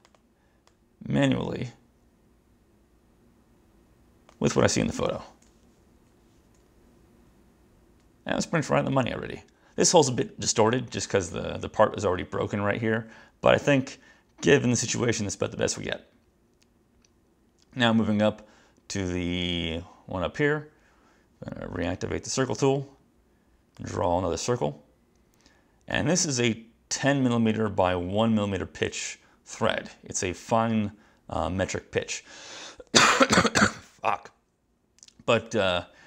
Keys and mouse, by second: 0.1 click, 0.8 click, 21.9 click, 23.8 click, 26.1 click, 35.6 click.